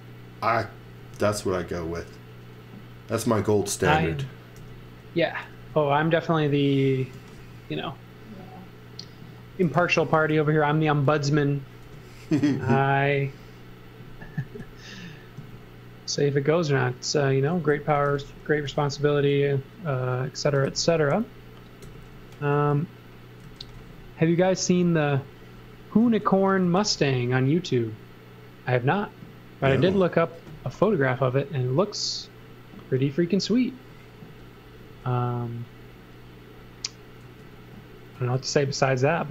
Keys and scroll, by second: 1.0 space, 4.6 n, 6.9-7.8 typing, 9.5 space, 9.8 z, 10.2 space, 11.8 m, 17.6-19.2 typing, 20.2-21.8 typing, 23.2-26.9 typing, 34.8 space, 35.8 space, 37.2 space, 38.1 space, 39.1 space.